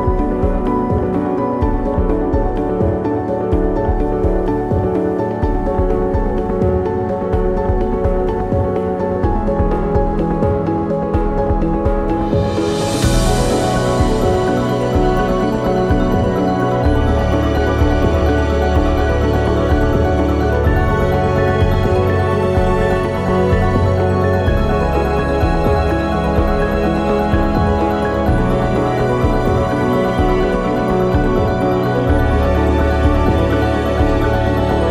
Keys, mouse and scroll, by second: 0.4 ctrl+z, 1.2 scroll up 1, 2.3 click, 3.6 ctrl+r, 14.6 KP_0, 16.2-17.4 scroll up 1, 17.6 scroll down 1, 18.2 click, 18.3 ctrl+r, 18.6 ctrl+z, 19.8 ctrl+r, 30.8 click, 32.1 ctrl+r.